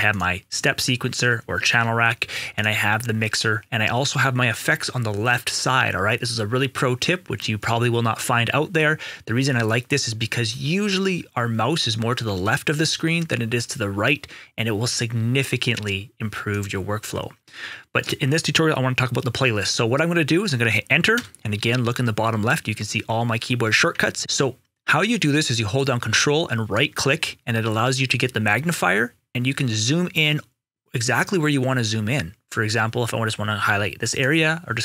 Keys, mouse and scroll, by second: 7.5 click, 16.4 click, 17.9 right click, 21.1 right click, 21.1 Return, 23.9 Return, 26.7 ctrl+right click.